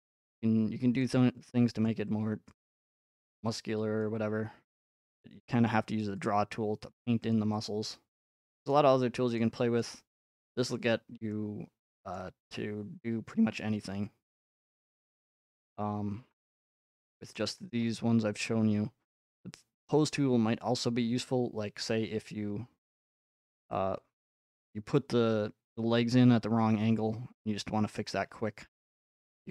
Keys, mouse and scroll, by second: 0.0 click, 1.3-2.1 scroll up 3, 2.5 click, 3.3-3.8 scroll up 1, 4.0 click, 4.6 scroll up 4, 6.3 click, 6.9 f, 7.3 click, 8.7 click, 9.4 click, 10.0 scroll, 10.7-11.2 scroll up 7, 12.1-12.5 scroll up 1, 14.3-15.0 scroll up 6, 15.6-16.1 scroll up 2, 16.0 middle click, 16.4 scroll, 17.0 scroll, 17.3 shift+middle click, 18.4 middle click, 19.9 click, 28.0 click.